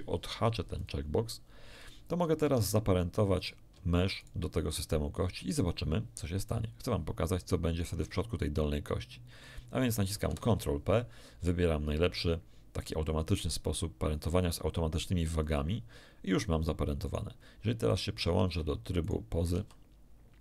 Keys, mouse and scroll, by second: 0.7 click, 2.4 Tab, 3.3 right click, 4.1 shift+right click, 10.2 ctrl+p, 15.4 click, 17.0 right click, 17.9 right click, 18.3 ctrl+Tab, 19.0 ctrl+right click, 19.5 ctrl+r.